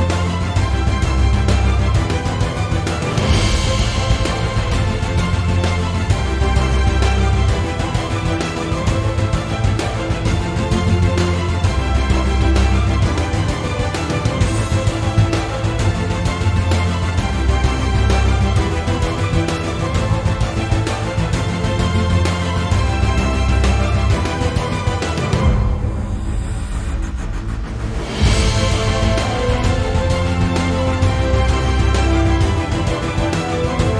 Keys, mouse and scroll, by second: 0.6 x, 3.3 Tab, 3.6-6.5 right drag, 4.2 Escape, 4.5 Tab, 4.7 a, 5.4 Escape, 5.7 p, 6.3 Tab, 6.5 click, 7.0 Delete, 7.2-7.8 middle drag, 7.8 click, 8.1 scroll down 1, 8.3-10.2 middle drag, 10.2 click, 10.6 Tab, 11.1-11.6 scroll up 1, 11.6 click, 13.3 alt+shift+click, 14.1-21.0 middle drag, 19.7 Tab, 20.5-21.0 scroll up 1, 21.0-23.9 drag, 22.8-23.6 scroll down 1, 24.8 click, 25.3-31.1 middle drag, 29.8-31.1 scroll down 2, 31.1-33.3 drag, 32.2 Tab, 33.5 alt+shift+click.